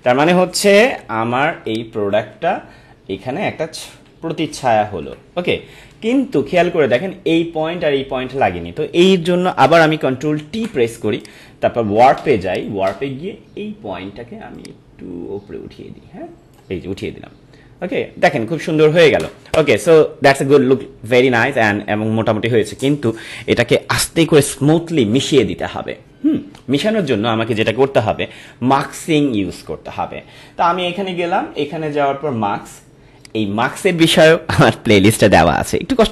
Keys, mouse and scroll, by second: 0.9 ctrl+=, 1.5 space, 1.7 click, 4.5 Up, 6.0 ctrl+=, 9.8 ctrl+=, 10.6 ctrl+t, 11.2 right click, 12.5-19.1 drag, 33.2 click.